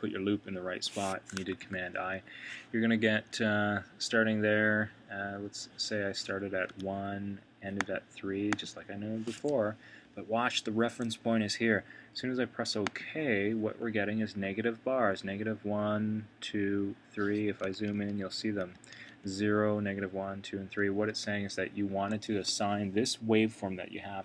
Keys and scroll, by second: 1.5 super+], 17.7 super+], 18.7 super+[.